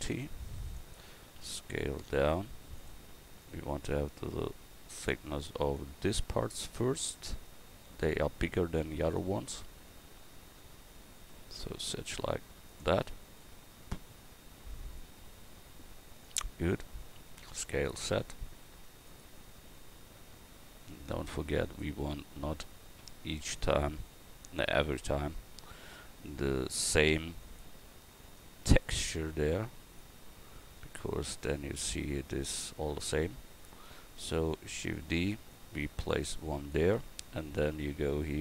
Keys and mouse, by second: 34.8-38.3 drag, 34.8 shift+d.